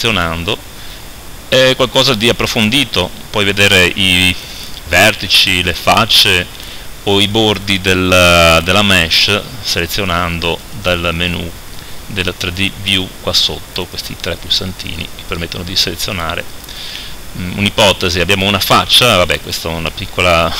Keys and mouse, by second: 2.5 click, 5.6-18.1 drag, 19.7-20.5 right drag.